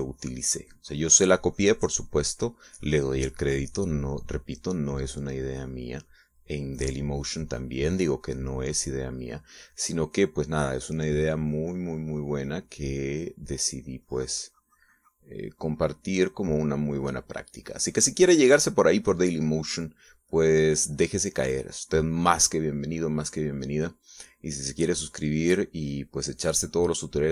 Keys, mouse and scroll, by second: 7.5-9.8 drag, 9.8 middle click, 10.9 middle click, 11.7-16.3 drag, 16.6-21.0 drag, 25.3-27.3 drag.